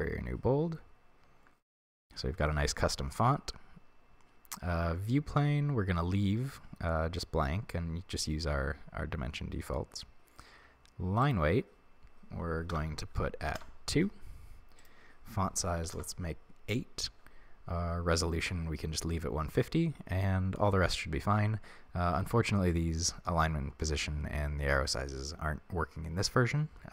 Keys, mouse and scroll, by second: 13.6-26.9 drag, 13.7 Return.